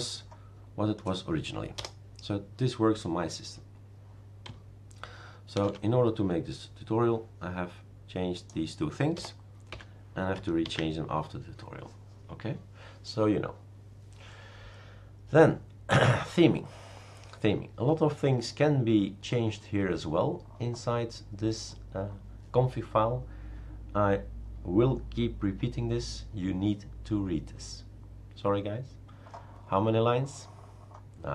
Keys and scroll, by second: 1.8 BackSpace, 5.6 #, 9.2 BackSpace, 9.7 1, 10.6 ctrl+s.